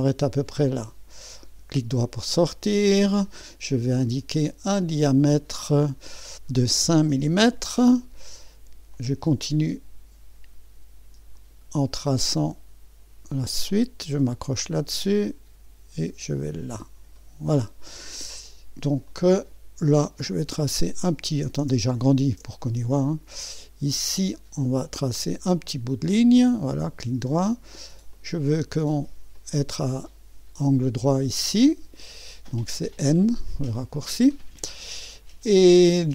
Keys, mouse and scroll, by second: 0.0 click, 1.3-2.8 right drag, 2.8-3.8 drag, 4.3-7.1 drag, 6.9-7.6 typing, 8.9 click, 11.3 click, 14.5 click, 16.3 click, 17.0 click, 17.2-19.1 middle drag, 19.1-21.5 drag, 21.8-22.7 scroll up 1, 22.5-23.6 typing, 22.5 middle click, 23.1 middle click, 25.0 click, 26.2 click, 26.7 middle click, 27.0 click, 27.3 right click, 28.1 click, 29.3 click, 32.6 click, 35.3 middle click, 35.8 right click.